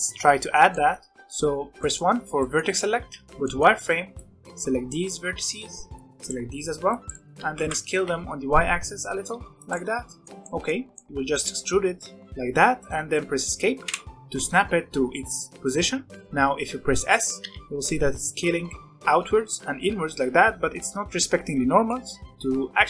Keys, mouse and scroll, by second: 0.6 scroll down 1, 0.7 middle click, 1.1 1, 1.1-2.1 middle drag, 2.1 scroll up 1, 2.3 middle click, 2.9 z, 3.4 middle click, 4.0 b, 5.3 middle click, 6.0 b, 6.8 b, 7.1 middle click, 7.3 s, 9.7 middle click, 10.3 scroll up 1, 10.4 middle click, 11.3 e, 17.4 s.